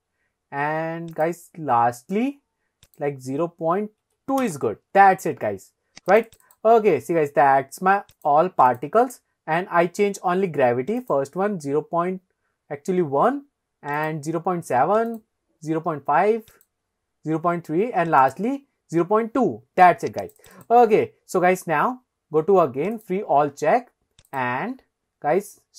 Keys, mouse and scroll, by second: 1.2 click, 2.9-4.5 drag, 6.1 click, 6.3 click, 8.2 click, 8.7 click, 11.0 click, 14.0 click, 15.1 click, 16.6 click, 18.2 click, 20.3 click, 20.5 click, 23.0 click, 24.3 click.